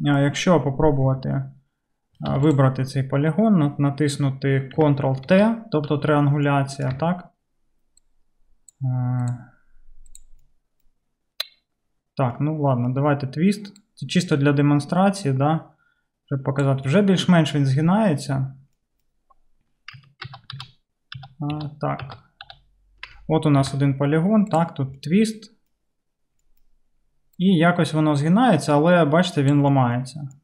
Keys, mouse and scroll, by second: 1.1 Tab, 2.4 Tab, 2.6-8.3 middle drag, 5.3 ctrl+3, 5.4 ctrl+t, 7.0 Tab, 8.3-9.4 drag, 9.4 middle click, 10.2 click, 10.3-16.2 middle drag, 13.9-24.6 drag, 20.3 ctrl+z, 20.5 ctrl+z, 21.2 ctrl+z, 21.5 ctrl+z, 22.1 ctrl+z, 22.5 ctrl+z, 23.7 Tab, 24.6-29.8 middle drag, 29.8-30.4 drag.